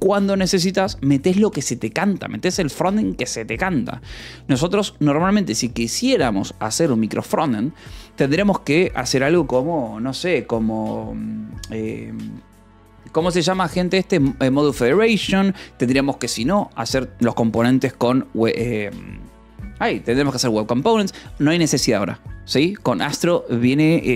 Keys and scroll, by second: 23.4 o.